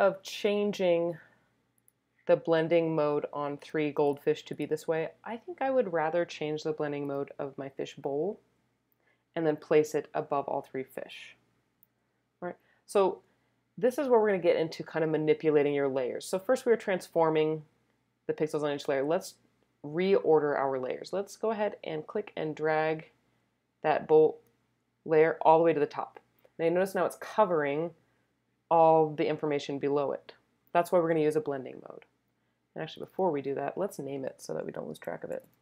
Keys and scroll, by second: 35.1-35.6 typing.